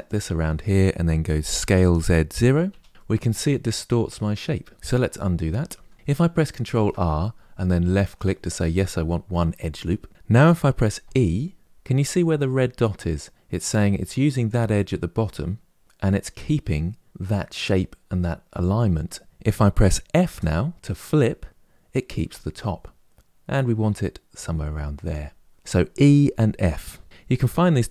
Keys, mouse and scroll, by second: 1.3 s, 2.9-4.7 middle drag, 4.7 ctrl+z, 5.4 ctrl+z, 5.9 middle click, 6.4 ctrl+r.